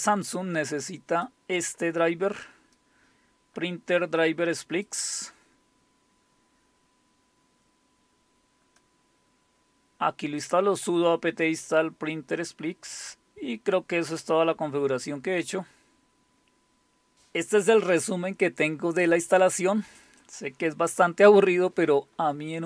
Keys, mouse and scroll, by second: 0.0-1.3 drag, 1.8 click, 2.7-5.5 drag, 5.7-6.6 scroll down 2, 8.8-10.4 drag, 11.8-14.6 scroll down 4, 14.6-17.1 scroll up 3, 20.0-21.4 drag.